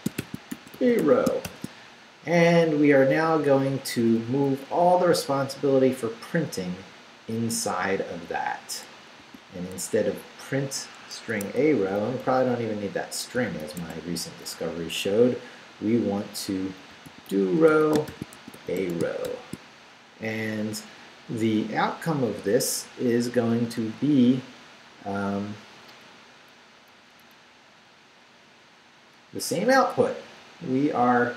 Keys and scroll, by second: 0.0-1.9 typing, 3.8 Up, 9.2 a, 10.1 BackSpace, 11.3 Escape, 11.6 Left, 12.9 shift+Left, 13.8 shift+a, 14.7 a, 16.7-19.8 typing, 20.1 shift+Up, 25.9 Up, 27.4 Left.